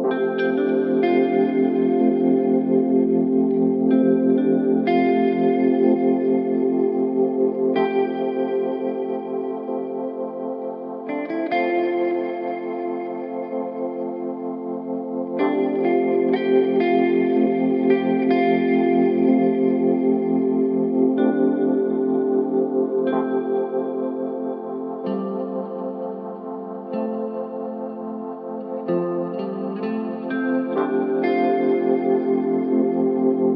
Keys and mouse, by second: 2.0 drag, 2.7-3.2 drag, 6.6 click, 8.4-11.3 drag, 13.3 click, 15.0-16.2 drag, 17.4-22.1 drag, 27.3 click, 27.9 click, 31.3-32.0 middle drag, 32.6-33.5 middle drag.